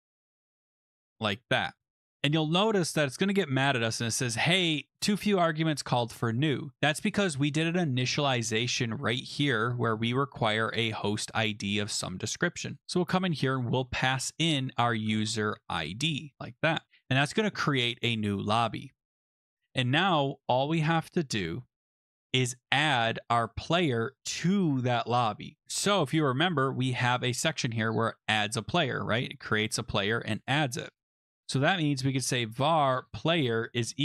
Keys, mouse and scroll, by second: 0.0-2.2 typing, 6.1-7.1 drag, 9.0 click, 10.5 click, 12.7 click, 14.6-16.9 typing, 16.3 Escape, 16.8 Return, 19.6 Right, 19.6 Return, 19.6 d, 26.4 click, 30.2 click, 30.4 click, 31.2 click, 31.7-33.6 typing.